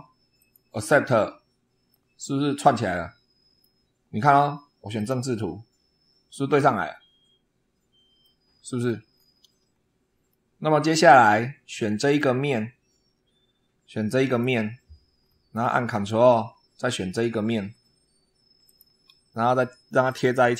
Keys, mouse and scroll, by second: 0.2 click, 1.7-3.7 middle drag, 4.8 click, 5.6 scroll up 1, 8.1 click, 9.0-9.3 scroll down 1, 9.5 scroll down 1, 10.1-10.9 drag, 10.9-12.2 middle drag, 13.5 scroll up 1, 14.1 click, 15.0 scroll down 1, 15.5 middle click, 17.6-18.0 ctrl+scroll up 1, 18.5 ctrl+click, 19.9 click.